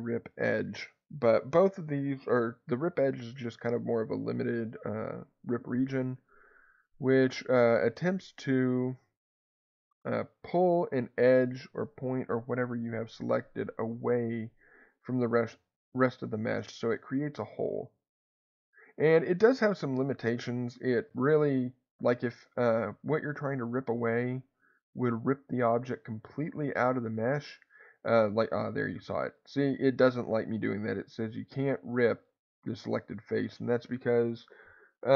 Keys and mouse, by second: 6.4 click, 7.9 click, 10.0-15.4 drag, 16.5 click, 17.4-18.5 drag, 21.1 3, 22.3 click, 27.1 click, 28.4-29.7 drag, 31.2-32.7 drag.